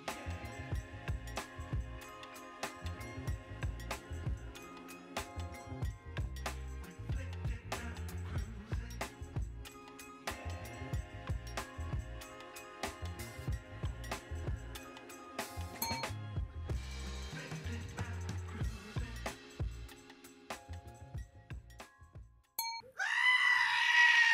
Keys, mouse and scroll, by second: 1.5 shift+middle click, 2.0 click, 2.8 ctrl+s, 3.9 click, 4.1 click, 4.5 click, 5.4-7.0 drag, 5.7 l, 6.4 BackSpace, 6.5 BackSpace, 7.6 click, 7.8 BackSpace, 7.9 BackSpace, 8.0 BackSpace, 9.5-9.9 drag, 10.1 click, 10.4 click, 10.8 l, 11.3 l, 11.7 click, 12.4 click, 12.9 click, 15.3 click, 17.7 ctrl+s, 18.3-19.5 drag, 19.6 click, 19.8 click, 20.7 click, 21.9 click.